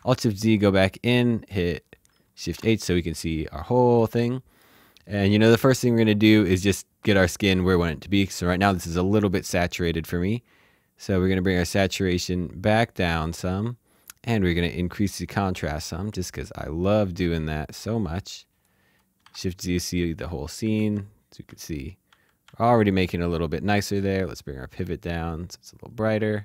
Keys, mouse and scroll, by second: 0.4 middle click, 2.3 shift+h, 3.8 h, 4.0 shift+middle click, 11.4 click, 19.2 shift+z, 20.3-22.4 typing, 23.7 typing, 24.3 click.